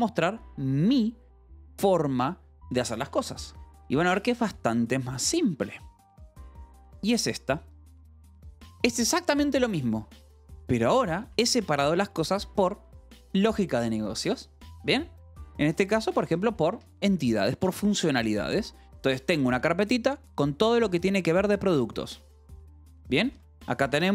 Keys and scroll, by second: 3.6 Escape, 3.8 j, 8.4 k, 10.9 shift+v, 11.1 Escape, 16.6 Escape, 19.7 shift+v, 22.4 Escape, 22.6 j, 23.7 shift+v.